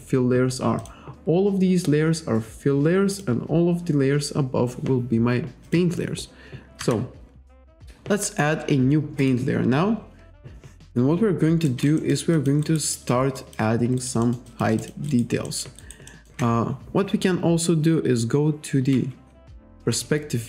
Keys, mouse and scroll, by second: 0.8 click, 1.3-2.1 scroll down 2, 2.1-2.5 scroll up 1, 3.1 click, 5.7 click, 6.8 Delete, 9.2 click, 11.7 alt+right click, 12.4 alt+click, 12.7 alt+right click, 13.0 alt+middle click, 13.4 alt+click, 14.0 alt+right click, 14.8 alt+shift+click, 15.1 alt+right click, 15.5 alt+middle click, 15.8 alt+right click, 16.1 alt+middle click, 19.0 F6.